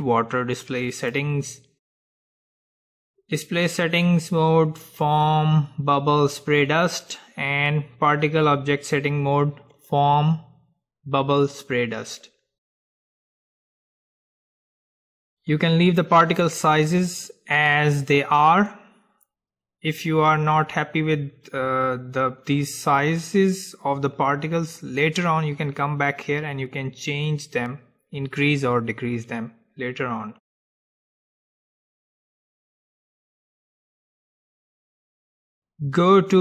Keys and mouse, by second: 1.2-3.2 drag, 1.6-4.2 middle drag, 5.0-7.1 drag, 6.6 middle click, 9.9-11.9 drag, 30.8-32.6 middle drag, 32.6-34.6 drag, 34.6-36.0 middle drag.